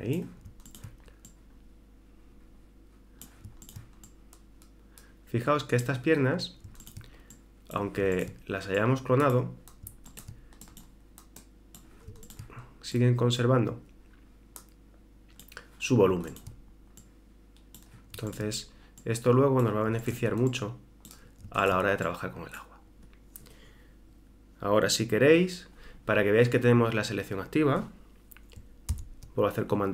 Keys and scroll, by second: 28.9 super+h.